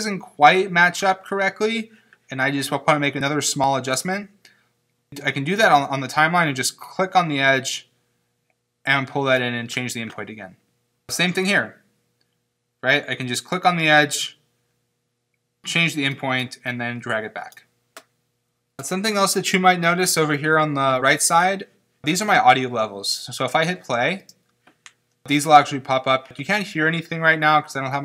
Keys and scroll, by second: 24.2 space.